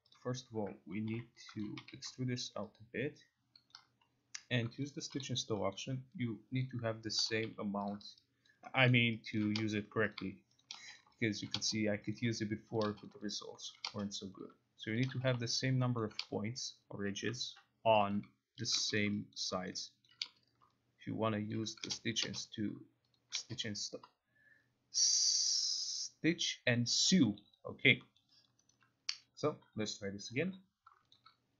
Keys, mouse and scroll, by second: 0.3 click, 0.8-1.9 typing, 1.7 click, 3.8 ctrl+click, 4.9 click, 5.2 g, 5.9 middle click, 6.7 click, 7.1-8.0 typing, 8.0 click, 8.6 alt+click, 9.0 alt+middle click, 9.5 alt+click, 10.3 click, 10.7 shift+click, 11.1 click, 11.5 alt+click, 12.3 click, 12.9 shift+click, 13.1 click, 13.5 alt+click, 13.8 alt+middle click, 14.6 click, 15.1 shift+click, 15.4 click, 15.8 alt+click, 15.9 alt+middle click, 16.1 alt+middle click, 17.7 alt+click, 18.3 click, 18.8 shift+click, 19.1 click, 19.5 alt+click, 19.8 alt+middle click, 20.1 alt+click, 22.7 click, 23.3 shift+click, 23.7 click, 27.2 click, 27.5 alt+middle click, 27.9 alt+click, 28.9 alt+right click, 29.9 click, 30.0-31.0 typing, 31.3 shift+click.